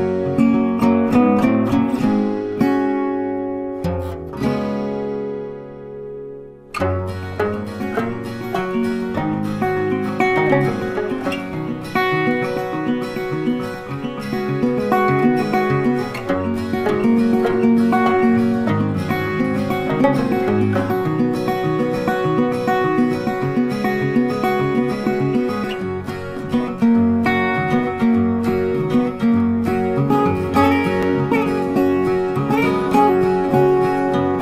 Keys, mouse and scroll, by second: 9.0 click, 10.9 a, 11.9 click, 13.3 click, 21.2 click, 29.9 click, 32.4 ctrl+a, 33.2 click.